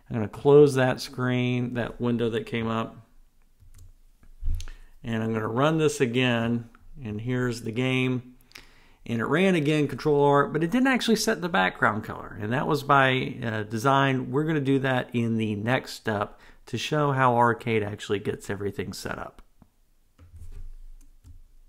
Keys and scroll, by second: 3.6 ctrl+r.